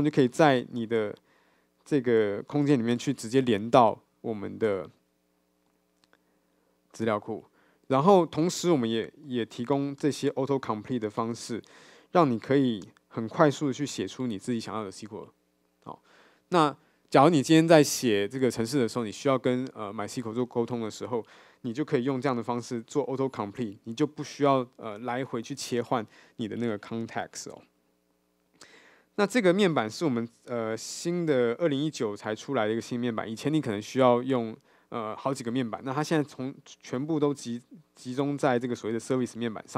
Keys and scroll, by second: 10.5 Return.